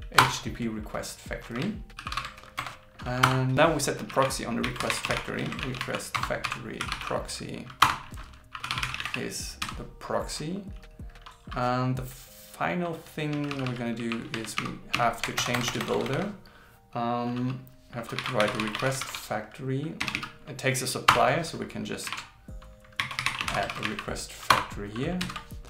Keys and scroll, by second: 2.0 shift+8, 5.5 shift+f, 19.0 shift+f, 23.7 shift+f, 25.2 super+Right.